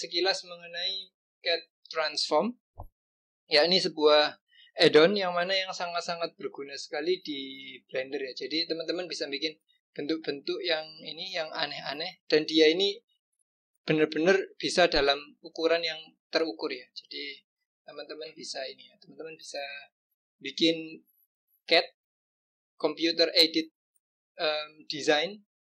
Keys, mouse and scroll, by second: 7.0-8.9 drag, 9.7-10.1 scroll up 2, 10.5-11.7 scroll down 2.